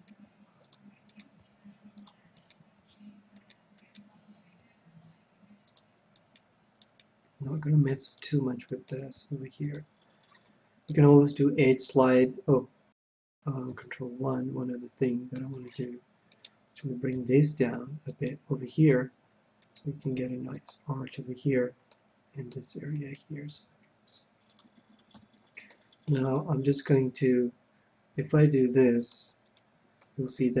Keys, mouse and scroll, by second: 0.7 g, 1.7-3.1 middle drag, 1.9 g, 3.1 g, 4.4-6.1 right drag, 5.0 g, 6.2-7.9 drag, 7.4-9.0 right drag, 8.0 g, 8.7-11.9 drag, 9.3-10.8 right drag, 9.7 g, 11.8-12.9 middle drag, 12.7 KP_1, 13.9 ctrl+KP_1, 15.0-17.6 middle drag, 16.3-18.1 right drag, 17.1 g, 18.2-19.9 drag, 19.6-21.4 right drag, 19.9 g, 20.6-22.2 drag, 21.9-23.6 middle drag, 23.0-24.9 right drag, 23.6 g, 24.6-26.1 drag, 25.2 KP_1, 25.7-27.4 middle drag, 29.0-30.6 drag.